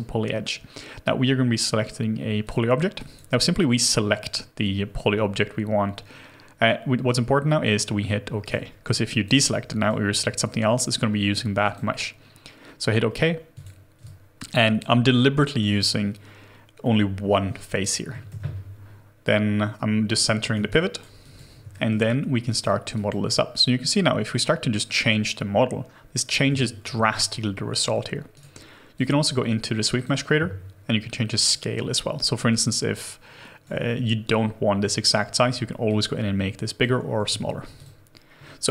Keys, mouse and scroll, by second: 14.0 alt+click, 18.3 ctrl+alt+q, 20.7 alt+right click, 21.2 alt+click, 21.7 alt+middle click, 26.5 ctrl+z, 28.3 right click, 37.3 ctrl+z.